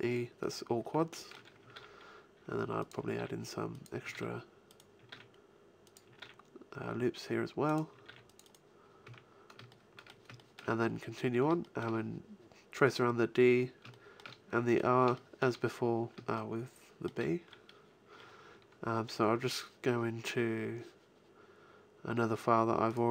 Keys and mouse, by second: 1.7 ctrl+r, 3.1 ctrl+r, 5.1 ctrl+r, 6.1 ctrl+r, 7.7 click, 8.0 ctrl+r, 9.0 a.